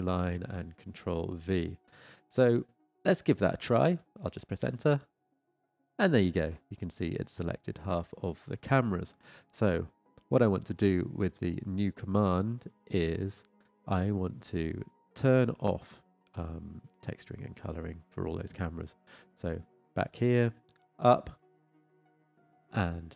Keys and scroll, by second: 1.7 ctrl+v, 5.5 Return, 21.1 Up.